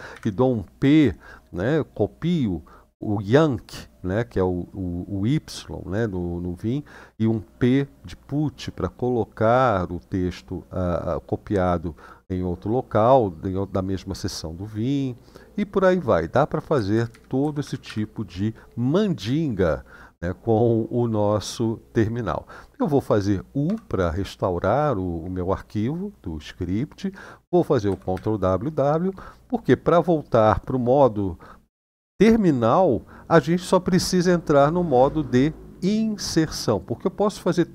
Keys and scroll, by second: 16.5 Down, 16.7 Down, 16.8 Down, 17.2 Up, 17.4 Up, 17.6 Up, 23.4 u, 27.6 ctrl+w, 27.9 ctrl+w.